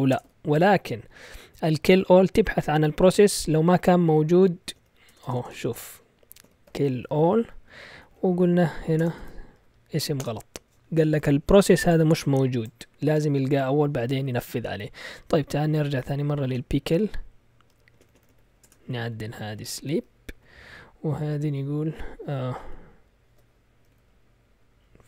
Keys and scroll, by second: 0.0-0.2 typing, 4.3-10.7 typing, 4.7 Right, 8.4 Right, 16.0-18.6 typing, 19.4 Left, 20.0 Left, 22.6 ctrl+o, 23.8 Left, 24.7 Left.